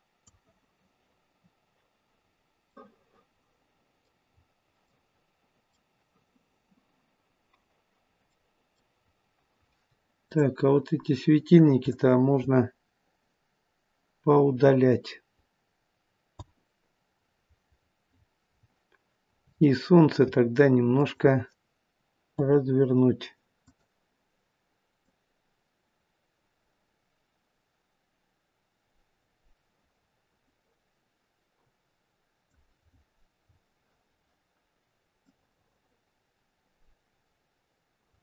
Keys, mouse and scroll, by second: 2.3-2.7 scroll down 3, 2.9 middle click, 4.5 scroll down 2, 5.0 middle click, 8.4 middle click, 8.8 middle click, 9.1 scroll down 2, 10.2 click, 11.8 shift+click, 16.5 Delete, 17.8-18.3 scroll up 2, 18.3-18.7 scroll down 6, 19.3 scroll down 2, 19.6 shift+middle click, 20.9 click, 22.5 Delete, 23.6 click, 25.0 click, 32.8-33.2 scroll up 6, 33.5-35.2 scroll down 4, 35.2 click, 35.2 scroll down 1.